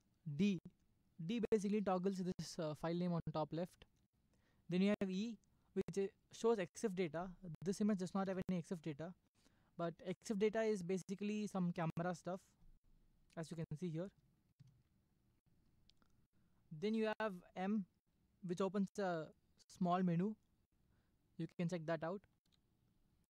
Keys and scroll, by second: 0.4 typing, 2.3 d, 3.9 d, 5.1 e, 8.3 Left, 14.5 Right, 16.9 e, 18.5 m, 22.4 m.